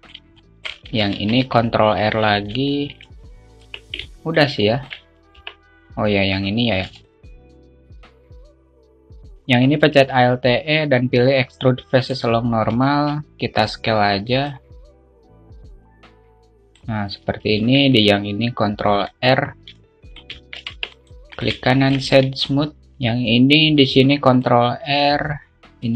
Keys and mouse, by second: 0.3 alt+shift+middle click, 1.0 shift+middle click, 1.7 ctrl+r, 3.2 alt+shift+middle click, 4.1 Tab, 4.6 alt+middle click, 5.1 alt+shift+middle click, 5.9 Tab, 7.3 click, 7.3 3, 7.7 click, 8.1 alt+middle click, 9.1 click, 9.3 alt+e, 10.3 alt+e, 15.3 alt+middle click, 15.9-17.9 drag, 18.1 ctrl+r, 20.3 alt+middle click, 21.2 Tab, 22.1 alt+shift+middle click, 24.1 ctrl+Tab, 24.5 ctrl+r.